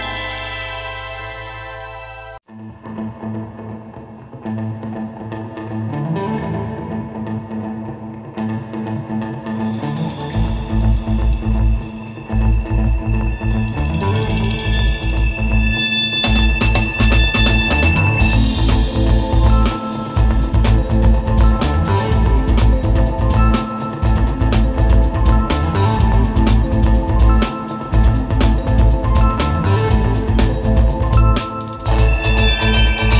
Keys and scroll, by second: 0.7 super+[, 2.0 super+g, 6.6 super+z, 8.8 space, 8.9 space, 9.3 super+", 9.8 space, 11.2 super+z, 12.0 super+z, 12.2 space, 14.9 space, 15.2 space, 16.7 super+g, 17.1 super+z, 18.4 super+z, 18.8 space, 19.2 space, 19.8 super+z, 22.8 space, 24.1 super+z, 24.6-27.1 typing, 25.9 super+z, 30.8 space, 31.5 super+space.